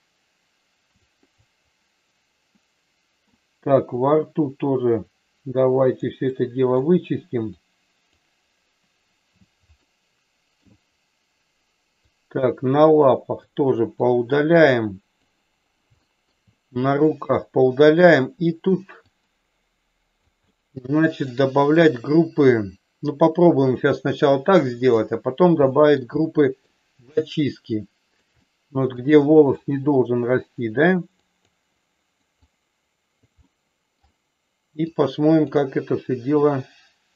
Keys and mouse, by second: 1.0 click, 1.5 click, 2.6 middle click, 4.0-5.9 drag, 6.4 middle click, 7.6 click, 9.7 shift+middle click, 12.1-13.4 drag, 14.0-15.1 drag, 16.0 shift+middle click, 16.9-18.6 drag, 19.1-20.2 drag, 20.5 middle click, 21.7-24.9 drag, 25.7 shift+middle click, 26.2 middle click, 27.4 click, 28.4 middle click, 29.6-30.9 drag, 31.1 click, 31.7 click, 32.4 click, 33.4 middle click, 35.0 click, 36.5 click.